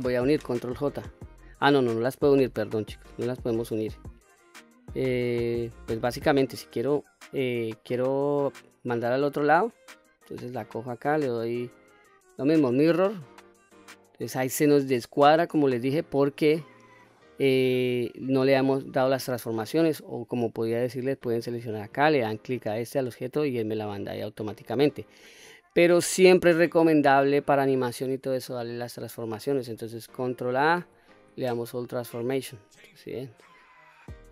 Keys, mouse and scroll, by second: 5.4 click, 5.9 click, 6.5-7.5 middle drag, 10.3-10.8 drag, 11.7-12.7 drag, 13.4-14.4 middle drag, 20.7 click, 24.0-24.9 middle drag, 25.4-26.2 middle drag, 28.6 click, 30.8 ctrl+a, 33.0-33.5 scroll down 1, 33.5-34.0 middle drag.